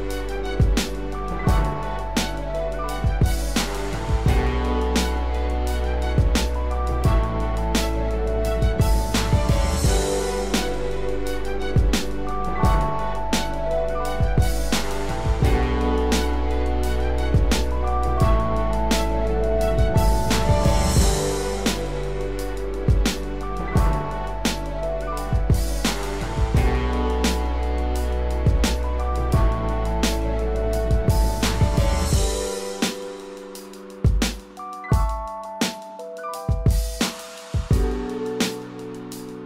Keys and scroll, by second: 0.7 ctrl+=, 16.3 ctrl+0, 17.6 ctrl+=, 26.5 ctrl+0, 28.5 ctrl+=, 33.6 ctrl+=, 33.8 ctrl+space, 35.1 ctrl+=, 35.9 ctrl+=.